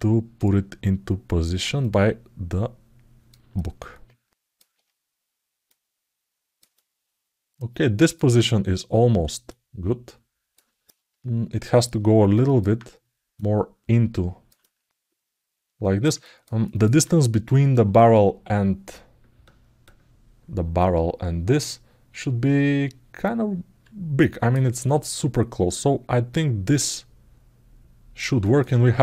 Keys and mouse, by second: 1.5-3.0 drag, 3.3-4.3 alt+middle drag, 5.5 click, 6.5-7.9 alt+middle drag, 9.3-10.3 drag, 10.6-12.3 alt+middle drag, 13.2-14.2 drag, 14.4-15.4 alt+middle drag, 24.0 alt+middle click, 24.4 alt+middle click, 24.8-26.0 alt+middle drag, 26.8-27.9 alt+middle drag, 28.1 alt+shift+middle click.